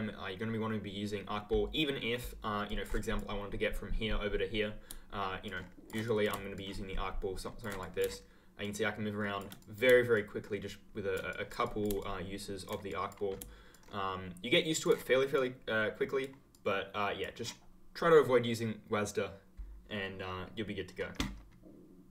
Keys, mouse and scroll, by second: 2.6 click, 5.4 ctrl+click, 5.5-6.0 ctrl+scroll up 1, 6.5 ctrl+click, 6.6-6.9 ctrl+scroll up 1, 6.9-7.7 ctrl+scroll down 1, 8.6 ctrl+click, 9.1-9.5 ctrl+scroll down 1, 10.1 ctrl+click, 10.4-11.0 ctrl+scroll up 1, 11.9 ctrl+click, 13.7 ctrl+click, 13.8-14.7 ctrl+scroll up 1.